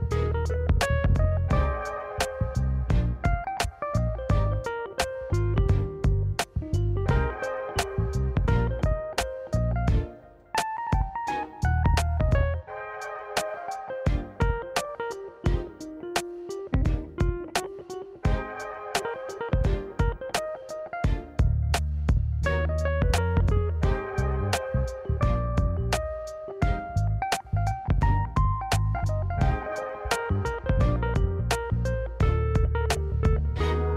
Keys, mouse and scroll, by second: 3.4 s, 5.5 middle drag, 5.7 alt+z, 6.0 middle drag, 7.5 middle click, 7.7 ctrl+z, 8.5 middle click, 9.0 ctrl+z, 9.3 ctrl+z, 9.9 middle click, 10.1 alt+z, 11.1 click, 11.8 click, 12.3 click, 13.5 click, 14.7 click, 15.0 click, 17.1 s, 18.0 s, 19.1-19.4 scroll up 1, 19.4-20.5 middle drag, 20.8 ctrl+z, 21.0 middle drag, 21.9 shift+right click, 22.3 middle click, 23.3 KP_1, 23.5 KP_3, 24.4 shift+right click, 24.7 middle drag, 24.9 n, 25.7 click, 27.4 s, 27.8 f, 31.1 g.